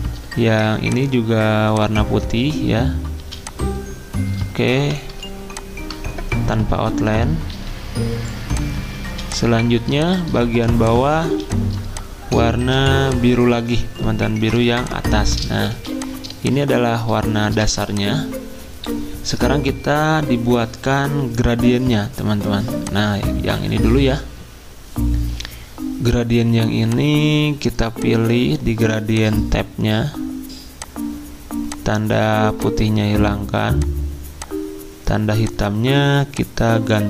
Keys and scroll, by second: 0.0-0.5 typing, 3.2 z, 4.7 v, 7.5 d, 9.1-11.2 typing, 12.3-13.1 typing, 14.5 i, 15.7 z, 16.8-17.5 typing.